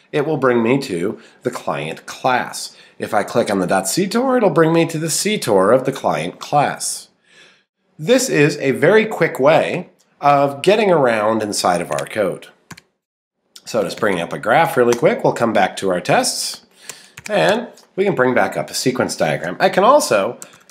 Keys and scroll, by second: 13.6 Right, 14.9 Return, 17.3 Return.